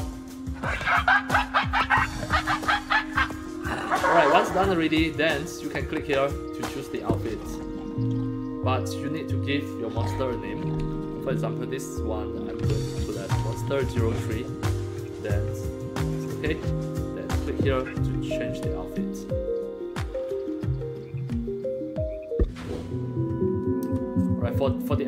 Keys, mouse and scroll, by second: 2.1-3.4 drag, 6.8 click, 9.0 click, 12.2-14.6 typing, 16.3 click, 17.3 click, 23.9 scroll up 1.